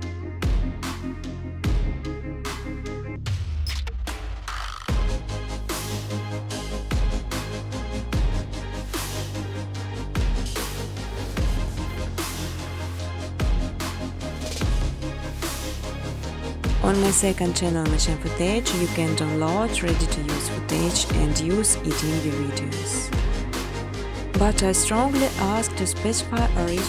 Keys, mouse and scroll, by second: 0.0-0.5 typing, 1.7 Tab, 1.9 Tab, 2.1 Tab, 2.1-2.9 typing, 4.0-4.7 typing, 7.4-8.2 typing, 9.6 Return, 11.5 click, 13.0 click, 13.2-15.2 typing, 17.8 typing, 18.7 click, 18.9-19.3 typing, 19.0 ctrl+z, 20.6 click, 21.7 click, 23.2-24.4 typing, 25.3 click, 25.5 click.